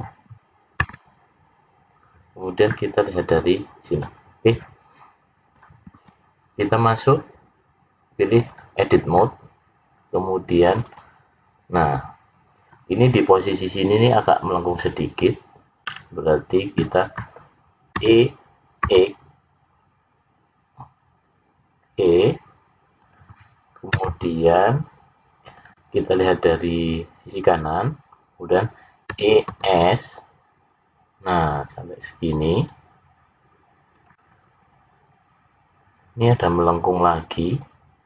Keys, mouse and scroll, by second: 3.8 click, 5.5 click, 9.1-10.0 scroll up 3, 10.6 click, 12.2 click, 15.7 middle click, 17.9 e, 29.1 e.